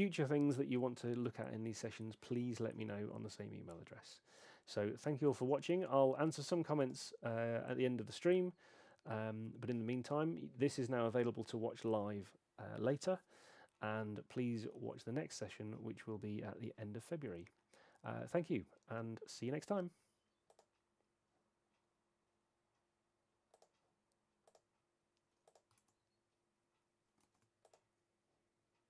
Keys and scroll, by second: 25.8 super+Tab, 27.2 shift+super+Tab.